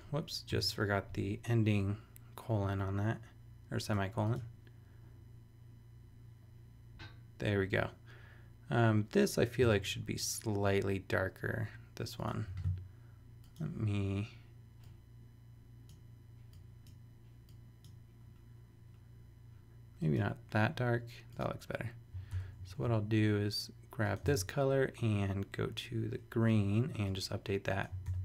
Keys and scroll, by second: 0.5 ;, 9.6 super+Tab, 12.5 super+a, 22.3 super+Return, 22.7 shift+super+e, 24.4 super+Tab, 28.0 super+v.